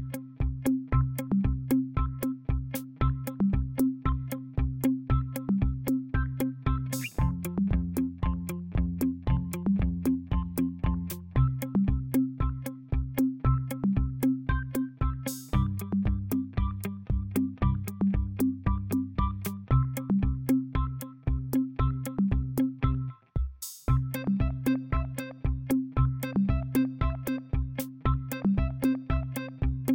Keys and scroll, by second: 4.1-7.9 typing, 8.9 ctrl+a.